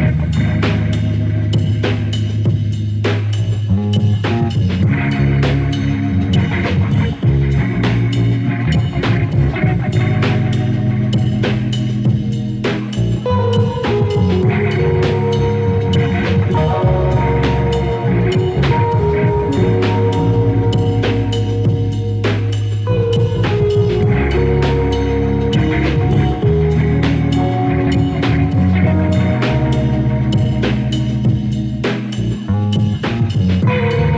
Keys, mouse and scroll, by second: 0.4 click, 1.2 click, 2.6 click, 3.4 click, 4.1 click, 4.8 click, 5.4 click, 6.5 click, 7.0 click, 8.1 click, 8.8 click, 9.3-9.7 drag, 9.8 KP_Decimal, 10.1-10.7 middle drag, 10.7 KP_Decimal, 11.1-11.9 middle drag, 11.9 click, 13.0-13.7 drag, 14.1-16.4 drag, 16.4 scroll up 3, 16.6 click, 16.9 ctrl+Tab, 17.5-20.5 shift+drag, 20.5-20.9 [, 21.0-24.3 drag, 24.3 scroll down 2, 24.4-25.0 scroll up 1, 25.0 scroll up 1, 25.3-26.3 drag, 26.5-28.7 drag, 29.1-30.1 drag, 30.6-32.0 drag, 32.3-34.0 drag.